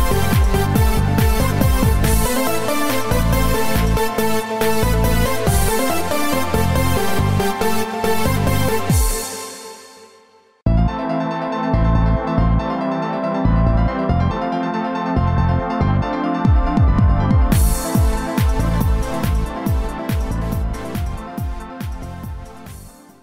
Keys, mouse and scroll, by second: 1.2 right click, 2.3 shift+right click, 3.1 shift+right click, 5.2 shift+d, 12.3 click.